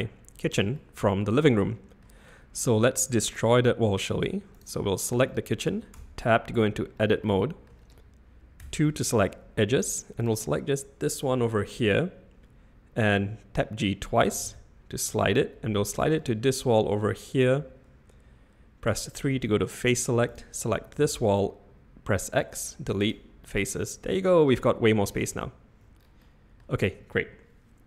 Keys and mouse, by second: 0.7 middle drag, 1.6-2.0 middle drag, 4.5 click, 5.9 Tab, 7.2 shift+drag, 7.4 shift+middle click, 8.6 2, 10.2 click, 14.3 g, 18.9 3, 21.0 x, 23.1 typing, 23.7-24.2 middle drag, 25.4 z, 26.2-26.6 middle drag.